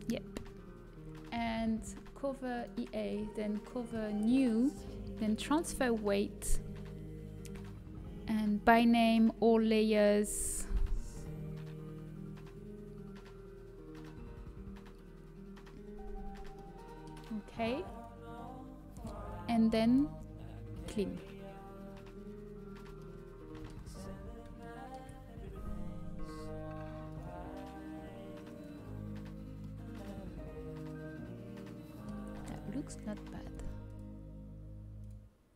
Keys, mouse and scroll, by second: 0.5-2.5 middle drag, 2.5-5.1 drag, 12.1-13.2 scroll up 1, 16.5-18.0 middle drag, 17.8-20.3 drag, 20.7-22.4 drag, 23.0-26.4 middle drag, 27.0-35.5 drag.